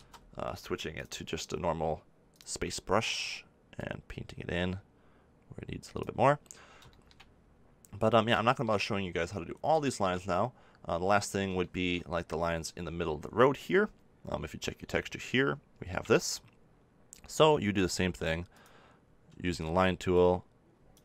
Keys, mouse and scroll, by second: 3.7-6.5 drag, 6.5-17.3 middle drag, 17.3 f, 20.1-21.0 drag.